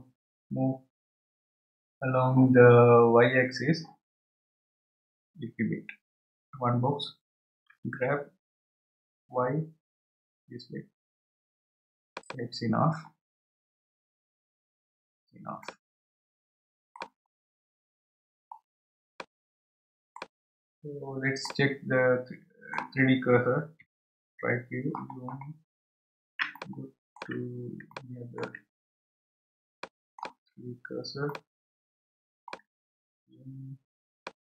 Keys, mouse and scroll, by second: 8.7 g, 13.1-14.0 scroll down 1, 14.0-15.0 scroll down 15, 15.6-17.3 middle drag, 17.3 scroll down 4, 18.1 scroll up 2, 18.6 scroll down 1, 19.1-20.4 middle drag, 20.4-21.5 scroll down 7, 21.5-23.9 middle drag, 23.9 KP_3, 24.8-26.4 scroll up 9, 26.4 scroll up 3, 26.5-29.0 shift+middle drag, 29.0-29.6 scroll down 3, 29.8-32.8 shift+middle drag, 32.8 scroll up 1, 33.5 scroll up 9, 34.2-34.4 shift+middle drag.